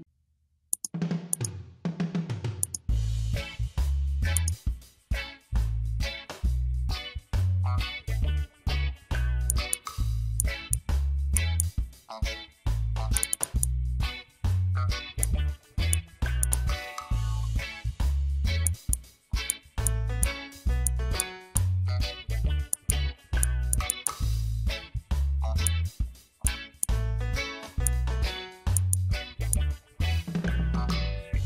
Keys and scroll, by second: 0.4 space, 19.4 space, 21.1 space, 28.7 space.